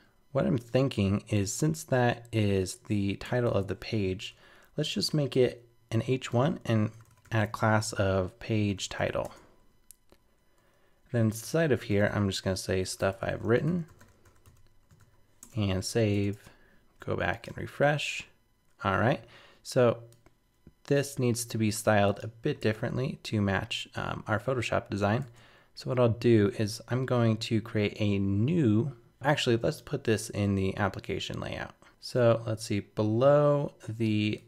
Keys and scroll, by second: 15.0 super+s, 15.4 super+Tab, 17.5 super+r, 22.6 super+Tab.